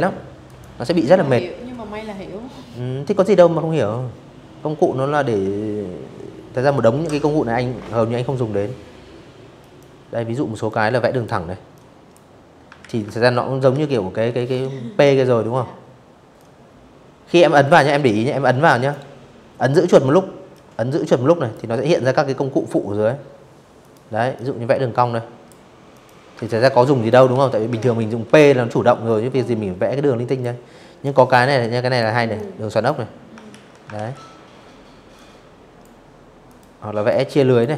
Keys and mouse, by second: 7.2 click, 8.4 click, 9.4 click, 10.5 ctrl+z, 11.4 ctrl+z, 11.9 v, 14.0 click, 18.2 click, 21.5 click, 22.0 click, 23.6 click, 24.2 ctrl+z, 24.8 click, 25.0 v, 25.5 ctrl+z, 25.9 v, 26.7-28.0 drag, 28.7 click, 30.0 click, 31.2 ctrl+z, 31.6 ctrl+z, 32.8 click, 34.2 click, 34.8 click, 36.1 ctrl+z, 36.4 click.